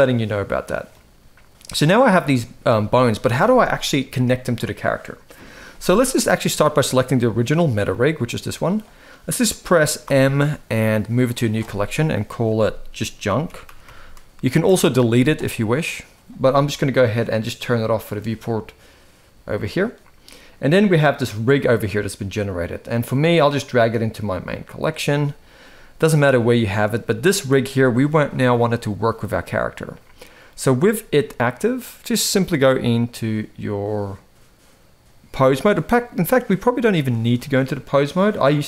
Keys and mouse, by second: 1.4-1.8 middle drag, 6.8 click, 7.7 g, 9.8 m, 17.9 click, 19.5 click, 23.1 click, 25.4-25.7 middle drag, 26.3 shift+middle drag, 27.2 g, 30.8 g, 32.3-36.4 drag, 37.1 shift+middle click.